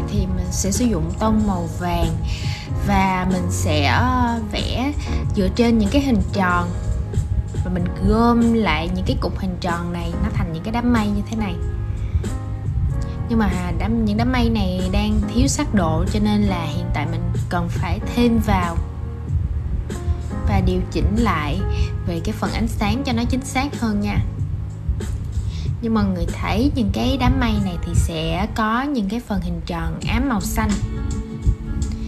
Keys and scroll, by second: 22.1 super+z.